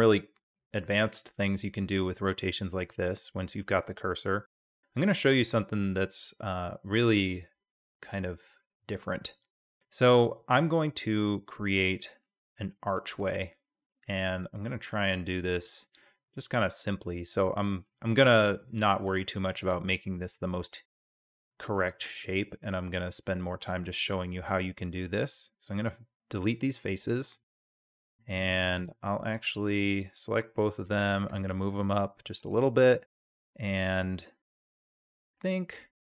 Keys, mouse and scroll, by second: 2.8 click, 13.9-16.4 middle drag, 16.4-16.9 drag, 16.9-17.9 middle drag, 18.0 Tab, 18.6 3, 19.6 shift+click, 20.1 drag, 20.3 middle drag, 20.5 shift+click, 21.4-22.1 drag, 22.5-23.9 drag, 24.1 x, 25.7-27.8 drag, 29.3-29.6 drag, 29.7 a, 31.0 g, 32.8-33.4 drag, 34.5-36.1 drag.